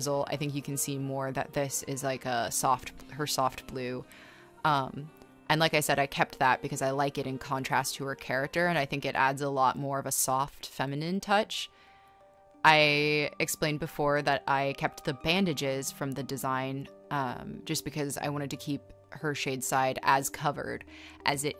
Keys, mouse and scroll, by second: 1.3 e, 3.5 ctrl+z, 5.7 e, 6.0 b, 6.7 b, 8.0 space, 9.1 ctrl+z, 11.6 b, 13.8 space, 15.6 space, 15.9 space, 21.1 space.